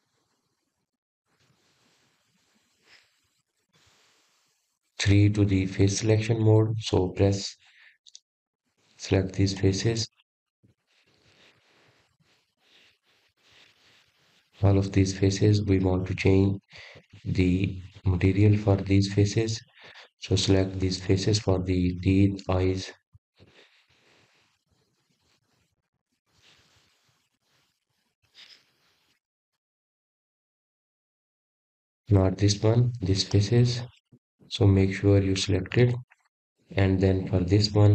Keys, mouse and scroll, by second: 1.6 Tab, 4.5 click, 6.1-7.1 drag, 7.1-9.5 middle drag, 9.5 3, 10.2 click, 13.8 shift+click, 14.3 shift+click, 14.7 shift+click, 15.0 shift+click, 15.4 shift+click, 15.8 middle click, 16.3-16.8 scroll up 1, 16.8 shift+click, 17.2 shift+click, 17.6 shift+click, 18.0 shift+click, 18.4 shift+click, 18.7 shift+click, 19.1 shift+click, 19.5 shift+click, 19.9-21.3 middle drag, 21.3 shift+click, 21.7 shift+click, 22.7 shift+click, 23.2-24.2 middle drag, 24.2 shift+click, 24.7-25.7 middle drag, 25.7 shift+click, 26.1 middle click, 27.0 shift+click, 27.3 shift+click, 27.8 shift+click, 28.2-29.3 middle drag, 29.3 shift+click, 29.8 shift+click, 30.1 middle click, 30.9 shift+click, 31.3 middle click, 32.0 shift+click, 32.5 shift+click, 32.9 shift+click, 33.2-34.4 middle drag, 34.4 shift+click, 37.0 shift+click, 37.5 shift+click.